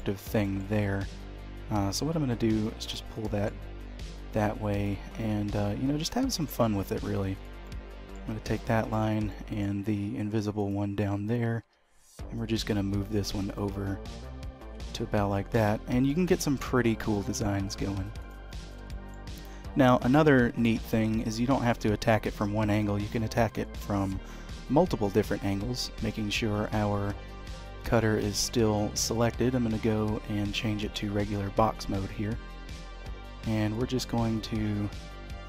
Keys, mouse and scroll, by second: 0.0-0.4 scroll down 4, 0.4 shift+middle click, 1.1 g, 3.2 shift+middle click, 4.7 click, 6.8 1, 7.3 click, 7.6 middle click, 8.8 shift+click, 9.3 middle click, 10.6 click, 11.6 g, 14.7 Tab, 15.1-16.3 scroll down 4, 15.5 h, 16.0 middle click, 18.2 click, 18.5-18.8 scroll up 4, 19.0 shift+middle click, 19.3 middle click, 20.9-21.3 scroll down 3, 23.0 click, 23.4-23.7 scroll up 3, 23.7 shift+middle click, 25.7 d, 33.7 click.